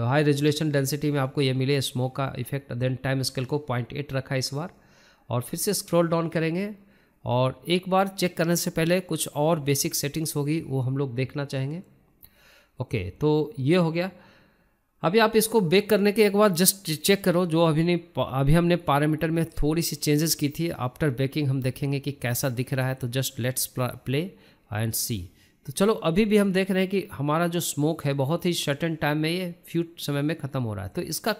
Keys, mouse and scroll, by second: 0.2-2.1 drag, 4.8-7.0 scroll down 5, 7.0-8.1 drag, 8.1-8.5 scroll down 3, 8.5-9.1 scroll up 2, 9.1-10.3 middle drag, 10.3-11.6 drag, 11.6 scroll down 1, 11.7 scroll up 1, 11.9-12.6 shift+middle drag, 12.6 scroll down 1, 12.8-14.4 shift+middle drag, 14.4-15.0 scroll up 1, 15.0 scroll up 1, 15.0-20.4 drag, 20.4 middle click, 20.9-21.2 scroll up 2, 21.2-22.6 middle drag, 22.6 KP_0, 24.4-31.3 drag.